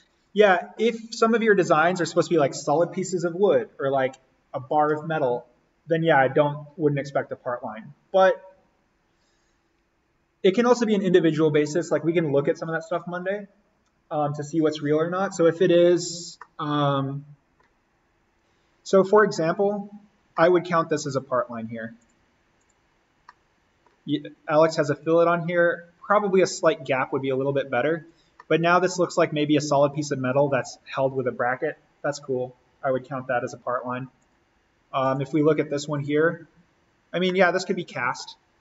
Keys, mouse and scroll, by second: 16.3 scroll down 1, 16.4-18.3 middle drag, 18.3 click, 19.0-19.9 scroll down 1, 20.4-22.0 middle drag, 22.0 click, 23.1 scroll down 1, 23.3-24.8 middle drag, 24.8 click, 25.3-26.7 scroll up 1, 27.1-27.8 scroll up 1, 28.1 click, 28.4 middle click, 29.4 click, 34.2 click, 37.1 scroll down 1, 37.3-38.6 middle drag.